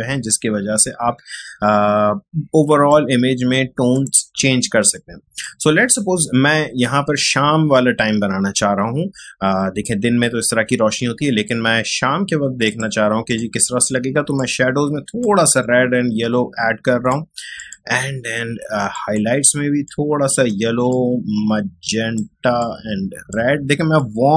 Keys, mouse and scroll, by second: 12.6 click, 12.7-24.3 drag.